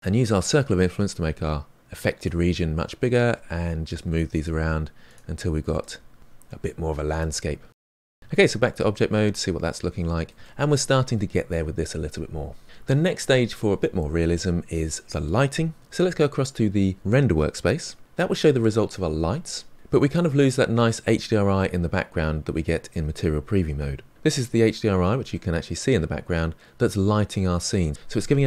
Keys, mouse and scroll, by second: 3.1 click, 3.2 g, 4.3 click, 4.5 middle click, 5.5 middle click, 6.2 click, 6.3 g, 6.7-8.2 middle drag, 8.2 Tab, 8.6 middle click, 9.1-9.7 scroll up 3, 9.7-16.2 middle drag, 18.0 click, 20.0-22.8 middle drag, 22.8 click, 25.5-28.4 middle drag.